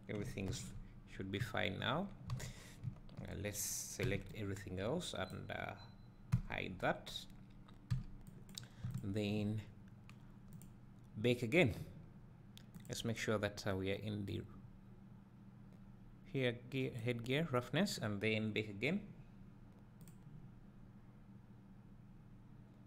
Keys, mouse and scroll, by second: 0.5 alt+h, 1.4 `, 2.0 scroll down 1, 2.4 alt+a, 2.6-2.9 scroll down 1, 2.9 `, 5.3 b, 6.4 h, 6.8 scroll up 1, 8.5 b, 9.0 shift+click, 10.8 drag, 21.1-22.8 drag.